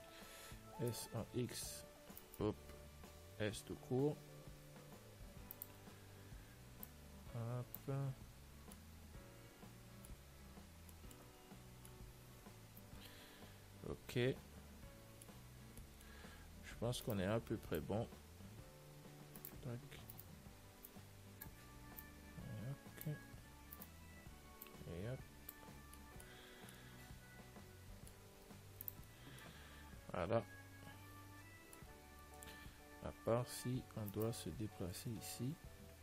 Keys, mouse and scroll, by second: 1.1 s, 3.6 s, 7.2 click, 8.7 middle click, 9.0-14.0 middle drag, 11.6 Tab, 16.6 Tab, 16.6-18.0 middle drag, 17.3-18.9 right drag, 18.0 click, 19.1 click, 20.4-22.3 right drag, 21.2-24.1 drag, 24.1 right click, 25.8 click, 26.2-29.0 middle drag, 26.7 Tab, 29.0 ctrl+s, 29.4-31.6 middle drag, 32.3-34.4 middle drag, 32.7 Tab, 34.4-36.0 right drag.